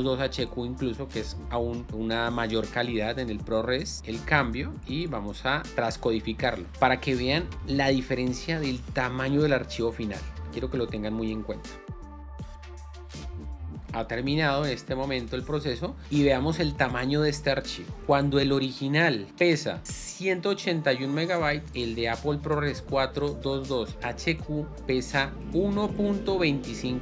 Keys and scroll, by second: 4.0 BackSpace.